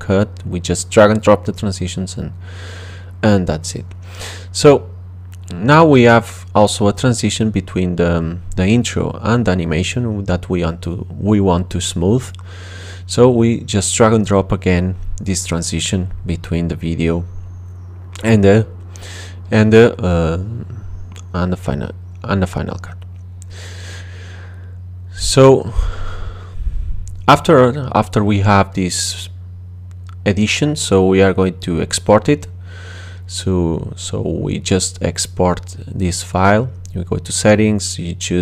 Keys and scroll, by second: 1.1 space, 3.2 space, 15.6 space, 24.1 space.